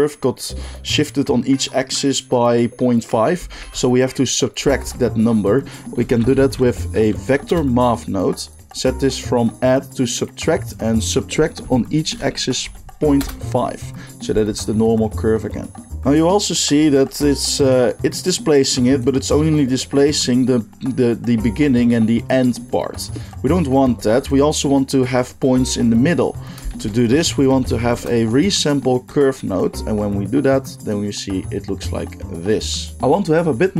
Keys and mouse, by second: 4.4-9.5 shift+drag, 4.7 shift+a, 9.5-16.9 middle drag, 16.9 shift+drag, 16.9 shift+right drag, 17.0-19.1 middle drag, 23.3-24.3 drag, 23.9 g, 26.7 shift+a, 29.1-30.0 middle drag, 30.0-33.0 drag, 33.0-33.7 middle drag.